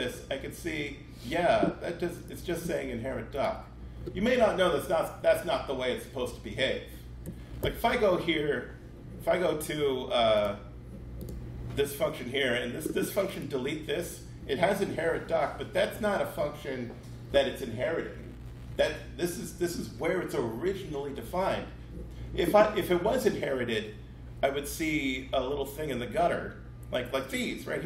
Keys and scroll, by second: 7.5 super+b.